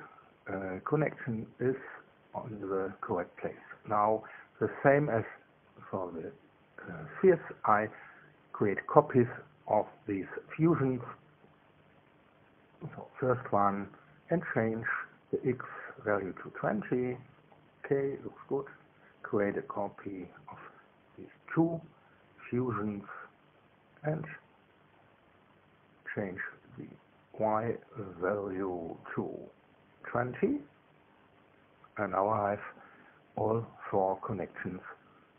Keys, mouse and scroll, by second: 6.0 click, 7.8 click, 8.2 click, 8.9 click, 9.7 ctrl+c, 11.6 Return, 12.4 ctrl+v, 13.9 click, 15.2 click, 16.1 2, 16.3 KP_0, 16.7 KP_Enter, 19.0 click, 19.8 shift+click, 20.9 ctrl+c, 22.4 Return, 23.1 ctrl+v, 24.4 click, 25.5 click, 26.6 KP_2, 26.9 KP_0, 27.4 KP_Enter, 29.1 click, 30.4 click, 31.4 BackSpace, 32.3 Return.